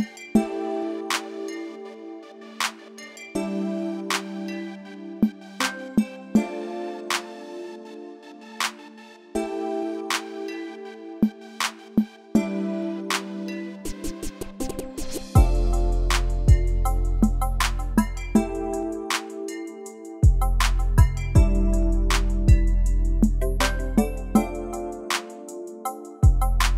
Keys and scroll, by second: 3.9 super+z, 12.5 super+z, 17.9 super+z, 23.2 BackSpace.